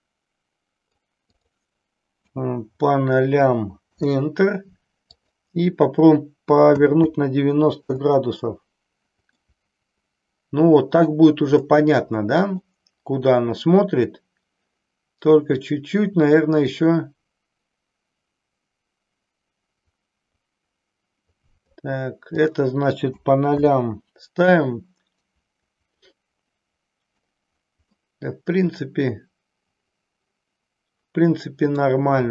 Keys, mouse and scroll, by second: 1.2 click, 5.0 click, 9.3-11.2 middle drag, 11.6-12.7 middle drag, 16.7-21.8 drag, 22.2-23.9 drag, 24.8-27.3 drag, 27.9-31.8 middle drag.